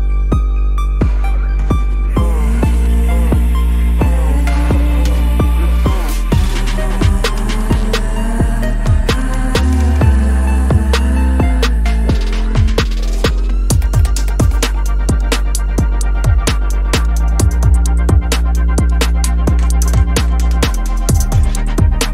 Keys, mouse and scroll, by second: 1.1 scroll up 1, 5.2 alt+shift+click, 6.2 double click, 14.1 double click, 15.3 ctrl+-, 15.5 ctrl+-.